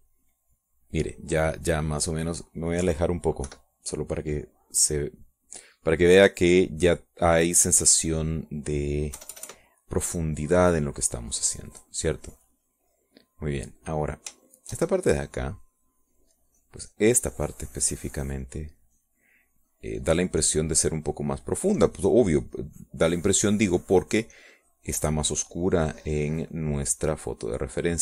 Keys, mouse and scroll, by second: 0.1 middle click, 0.9-2.1 middle drag, 2.6-3.8 middle drag, 4.0 KP_Subtract, 4.6 KP_Subtract, 5.1 click, 8.6 click, 9.5 click, 10.0 click, 10.3 KP_Add, 10.8 click, 11.1 middle click, 11.3-14.6 middle drag, 15.6-28.0 shift+drag.